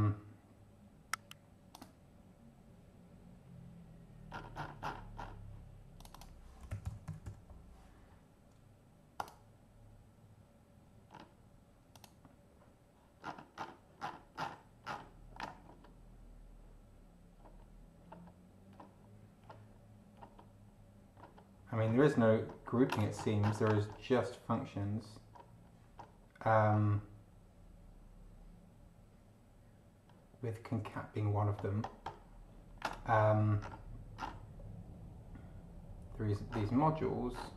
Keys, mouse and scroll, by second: 1.7 click, 4.3-5.1 scroll up 2, 6.0 click, 6.3-7.7 typing, 9.2 click, 11.1 scroll up 2, 11.9 click, 13.2-14.3 scroll down 5, 14.8-15.2 scroll down 2, 15.6-16.0 scroll down 2, 16.6 scroll down 2, 17.4-17.7 scroll down 2, 18.0-18.4 scroll down 2, 18.7-19.9 scroll down 4, 20.1-20.6 scroll down 2, 21.1-21.5 scroll down 2, 21.8-22.9 scroll up 4, 23.1-23.7 scroll up 2, 23.8-24.3 scroll up 2, 24.5-24.9 scroll up 2, 25.3-25.8 scroll up 2, 26.0-26.4 scroll up 2, 26.7-27.1 scroll up 2, 30.1 scroll down 2, 31.5-32.8 scroll up 2, 33.1 scroll up 2, 33.6-34.5 scroll down 4, 36.5 scroll down 2, 37.3 scroll down 2.